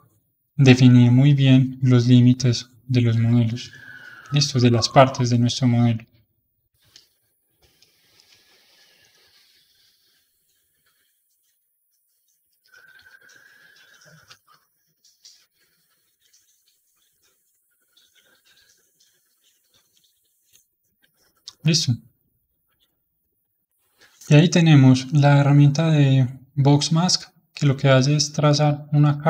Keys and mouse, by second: 0.4 shift+click, 0.9-2.0 middle drag, 2.0-3.7 shift+drag, 3.7-4.9 middle drag, 4.9-6.9 shift+drag, 6.9-9.7 middle drag, 9.7-15.4 shift+drag, 15.4-16.4 middle drag, 16.4 shift+click, 17.2-18.3 middle drag, 18.3-20.7 ctrl+drag, 20.7-26.2 middle drag, 26.2-27.8 drag.